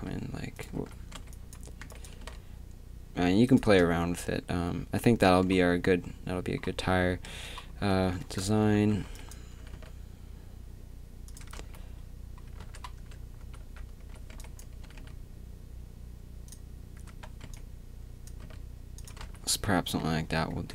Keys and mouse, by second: 3.6 Tab, 3.6 b, 7.3 Tab, 7.8-9.6 typing, 11.4-13.0 drag, 11.4 Tab, 11.6 z, 12.8-14.8 typing, 13.0 Tab, 17.1 a, 17.4 b, 18.2 click, 18.5 g, 19.1 Tab, 19.2 z.